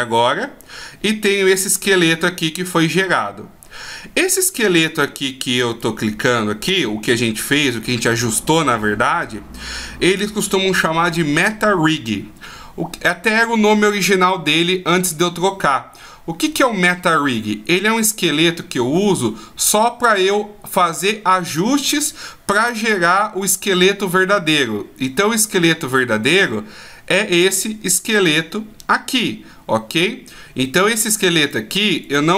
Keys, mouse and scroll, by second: 1.7 right click, 4.8 right click, 5.7 right click, 26.2 right click, 31.4 right click, 32.0 right click.